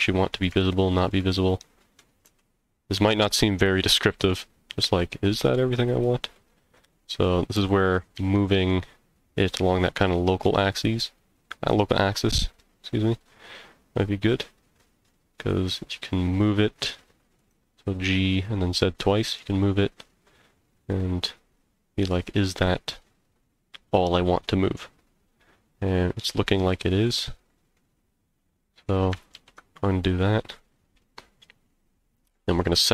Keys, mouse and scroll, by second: 0.7 shift+middle click, 1.3 middle click, 2.2 g, 5.9 right click, 6.3 middle click, 7.5 g, 8.1 z, 8.5 z, 17.4 click, 18.0 middle click, 19.0 scroll up 2, 19.3-27.0 middle drag, 27.7-28.9 middle drag, 29.3 ctrl+z, 30.3 scroll down 1, 31.0-32.3 middle drag.